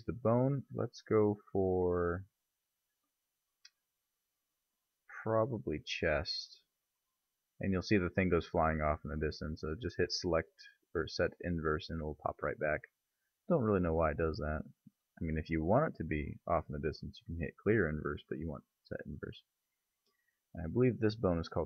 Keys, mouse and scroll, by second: 0.1 click, 11.5 click, 13.2-16.2 middle drag, 16.2 click, 18.1 click, 19.6 click, 20.2-21.0 middle drag, 21.0-21.6 right drag.